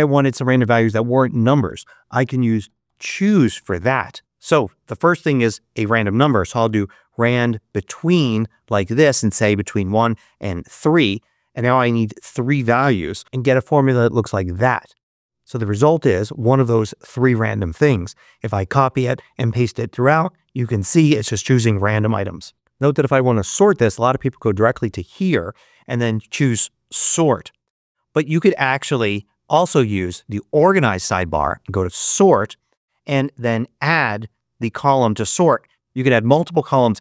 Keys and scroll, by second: 3.9 shift+9, 5.8-7.0 typing, 7.8 Right, 8.2 Return, 9.2 1, 10.0 3, 12.9-13.7 typing, 17.9 super+c, 19.4 super+v, 29.0 super+z.